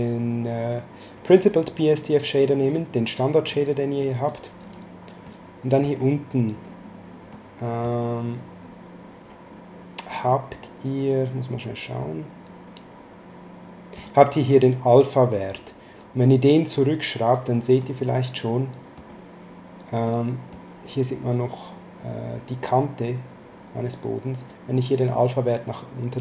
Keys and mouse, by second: 1.3 click, 3.5 click, 5.3 middle click, 7.3 middle click, 10.2 middle click, 15.3 click, 17.8 middle click, 20.0 middle click, 24.5 click.